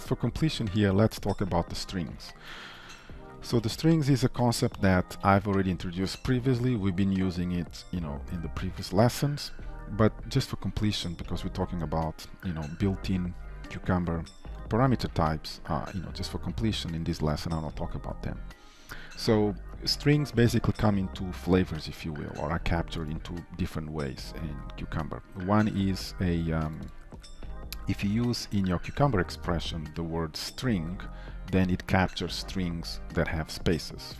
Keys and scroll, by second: 4.8 ctrl+/, 5.2 ctrl+s, 28.9 ctrl+shift+Right.